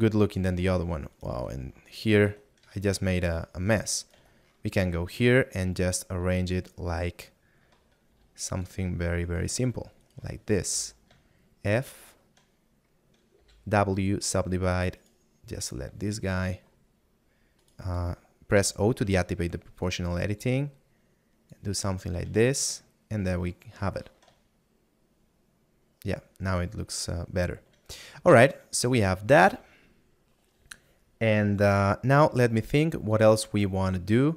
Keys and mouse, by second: 2.7 middle click, 7.3 middle click, 11.6 middle click, 15.9 click, 17.6 right click, 20.7 click, 24.8 middle click, 32.2 middle click.